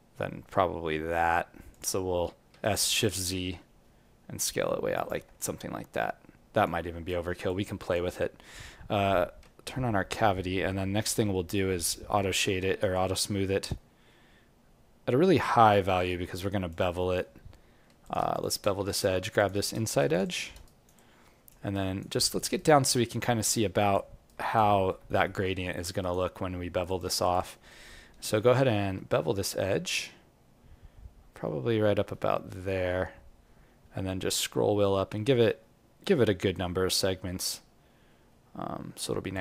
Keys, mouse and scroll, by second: 5.4 alt+click, 7.0 alt+right click, 7.4 alt+click, 9.4 w, 12.6 alt+right click, 12.9 alt+click, 14.0 w, 16.3 alt+click, 16.9 right click, 18.0 click, 18.3 shift+click, 18.8 alt+click, 20.1 shift+click, 20.6 alt+right click, 20.9 alt+click, 21.7 alt+right click, 22.1 alt+click, 22.5 alt+right click, 23.0 alt+middle click, 23.5 alt+click, 24.2 alt+right click, 24.7 alt+middle click, 25.1 ctrl+r, 26.8 click, 27.2 shift+click, 27.6 click, 28.9 Tab.